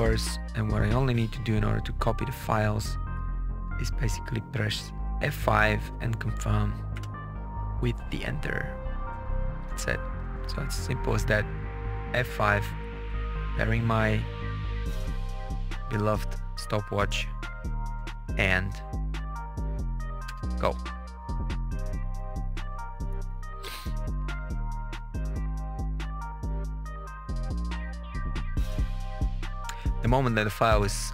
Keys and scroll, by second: 6.8 F5, 12.4 F5, 20.1 Return.